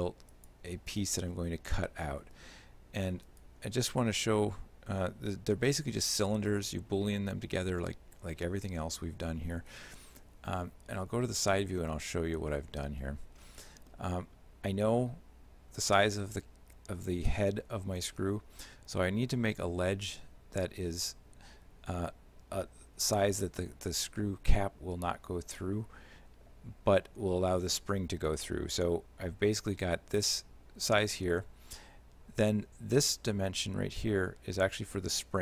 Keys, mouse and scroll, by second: 0.4 shift+click, 1.4 shift+middle click, 3.3 right click, 4.0 shift+middle click, 10.5 KP_1, 12.6 middle click, 13.0-13.6 scroll up 3, 13.7 middle click.